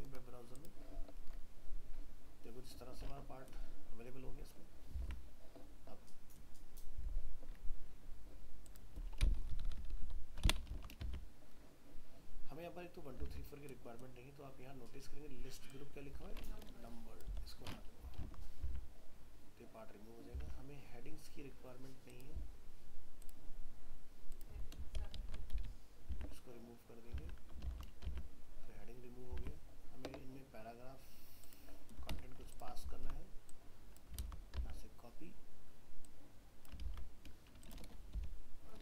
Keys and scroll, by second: 5.0 alt+Tab, 10.7 ctrl+s, 11.1 alt+Tab, 18.2 ctrl+s, 18.7 alt+Tab, 26.1 alt+Tab, 27.7 ctrl+s, 28.1 alt+Tab, 34.2 ctrl+c, 34.6 alt+Tab, 36.9 ctrl+v.